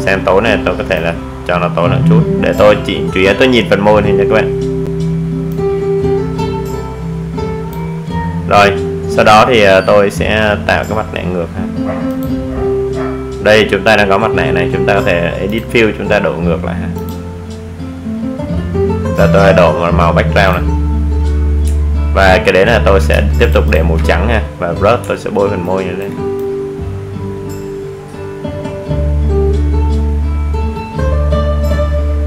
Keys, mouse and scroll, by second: 1.3-6.0 drag, 6.0-12.0 drag, 15.1 click, 20.0 click, 21.5 alt+scroll down 1, 22.5 ctrl+space, 22.8 ctrl+click, 23.0 ctrl+space, 24.6 alt+scroll up 1, 24.9 alt+right click, 25.6-32.2 drag.